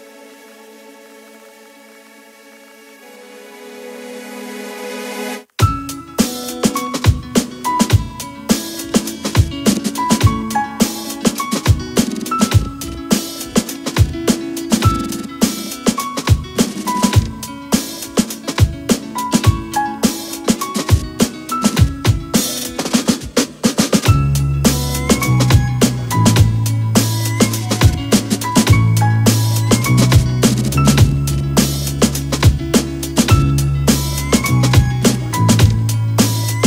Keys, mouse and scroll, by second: 5.5 click, 11.1-11.4 alt+scroll up 1, 11.8 alt+scroll up 1, 13.1 alt+click, 20.8 Return, 21.9 click, 27.0 click, 28.9 Return, 29.9 Up, 31.1 Up, 31.4 Left, 34.8 click.